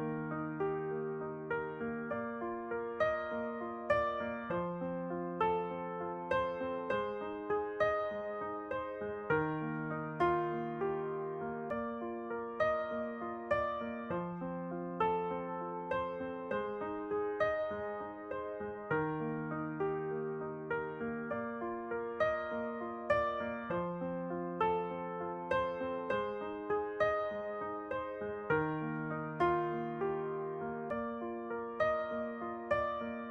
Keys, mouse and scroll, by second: 0.2 middle click, 0.9 alt+s, 1.7 middle click, 4.2-8.7 middle drag, 7.5 alt+s, 10.1 s, 12.9-15.6 middle drag, 18.4 click, 19.3 middle click, 20.0 click, 20.1 s, 22.8-24.6 middle drag, 24.9 e, 25.8 alt+s, 30.1-33.3 middle drag, 31.3-33.3 drag.